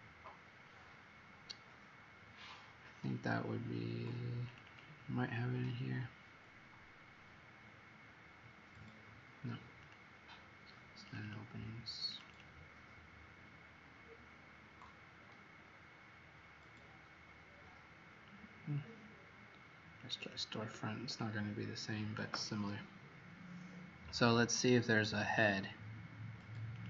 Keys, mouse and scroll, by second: 4.6 click, 9.7 click, 12.2 click, 19.9 click, 20.1 click, 21.0 click.